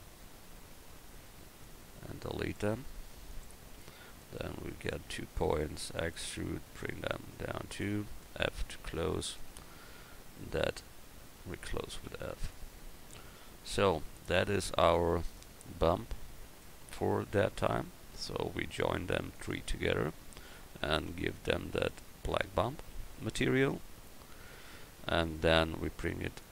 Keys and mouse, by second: 2.8 x, 4.1-5.9 right drag, 5.9 e, 8.7 f, 9.5 Tab, 9.9 Tab, 10.6 a, 11.1 a, 12.0 f, 12.5 Tab, 26.4-26.5 middle drag.